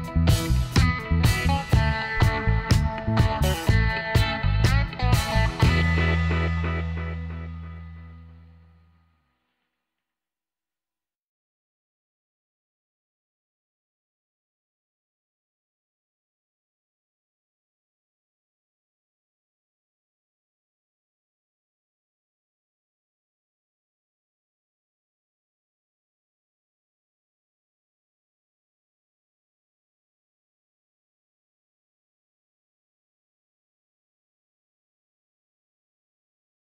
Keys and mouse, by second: 4.2 z, 4.5-6.8 middle drag, 8.8-10.1 drag, 10.1 middle click, 10.7-11.8 right drag, 11.9 x, 13.4-15.5 middle drag, 15.6-17.4 drag, 17.4 middle click, 18.4 alt+h, 19.1 middle click, 19.4 click, 19.5 middle click, 19.7 Tab, 22.4 Tab, 22.6-24.5 middle drag, 25.5 middle click, 25.8-27.7 drag, 26.7 right click, 27.5 x, 27.7 right click, 31.6-32.7 middle drag, 33.3 middle click, 34.4-36.6 drag, 35.1 right click.